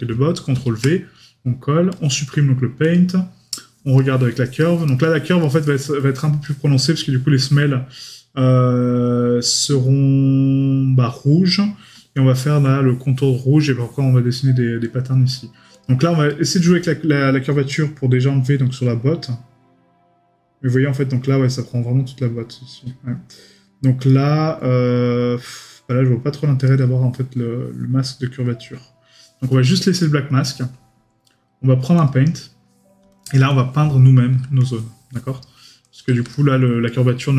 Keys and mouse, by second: 4.0 right click, 5.4 middle click, 6.0 right click, 16.3 right click, 30.0 right click, 36.3 right click.